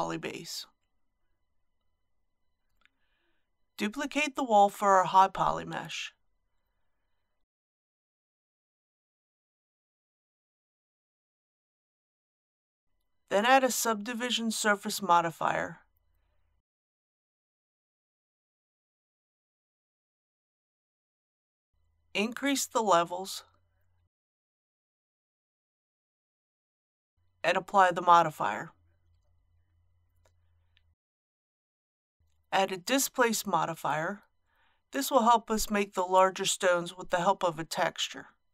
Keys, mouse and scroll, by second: 3.4 Tab, 4.1 shift+d, 6.7 click, 9.2 BackSpace, 11.2-11.6 typing, 12.1 Return, 17.3 click, 24.8 KP_6, 31.2 ctrl+a, 32.2 scroll down 1, 33.7 click.